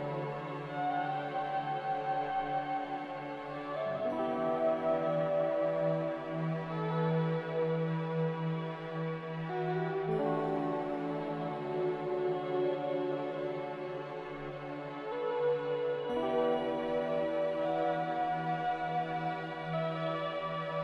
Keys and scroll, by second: 0.1 ctrl+c, 3.2 ctrl+v, 3.4-4.2 typing, 8.1 Delete, 9.5 m, 14.3 a.